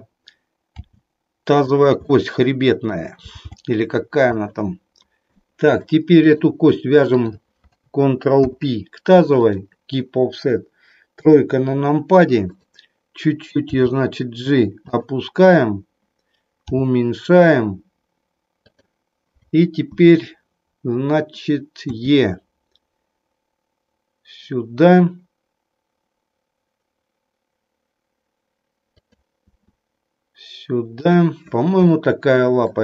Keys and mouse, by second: 0.7 g, 2.1 middle click, 3.2 g, 3.5 g, 4.2 click, 5.4 middle click, 6.2 click, 7.1 shift+click, 8.4 ctrl+p, 11.1 KP_3, 13.6 g, 14.9 click, 16.7 g, 18.7 click, 21.9 e, 29.4 e, 31.0 click, 31.9-32.8 shift+middle drag.